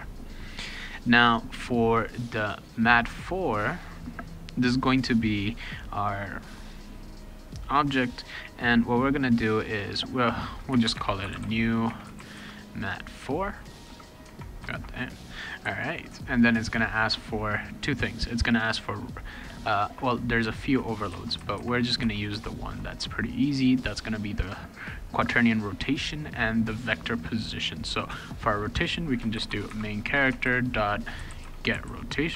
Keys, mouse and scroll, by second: 2.5 click, 3.1 click, 3.6 click, 10.6-15.6 typing, 14.2 Tab, 29.1-32.3 typing, 30.3 Tab.